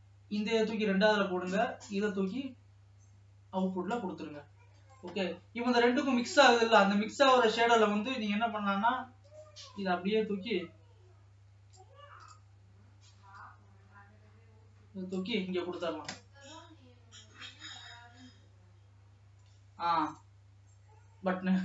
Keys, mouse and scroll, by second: 0.0-12.3 drag.